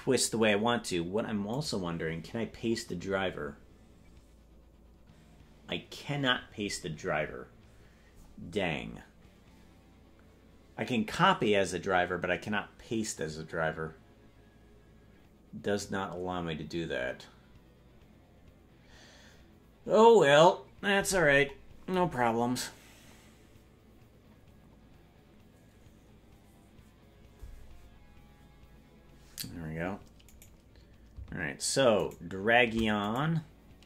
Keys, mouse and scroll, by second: 1.5-11.3 right drag, 30.5-33.0 right drag.